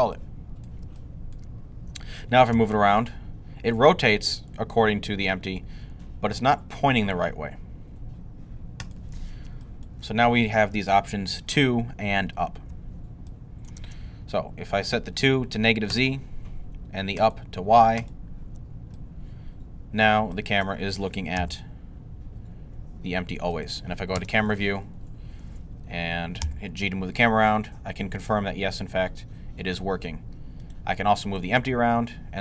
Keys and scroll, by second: 2.3 g, 21.2 g, 24.0 0, 26.3 g, 31.4 g.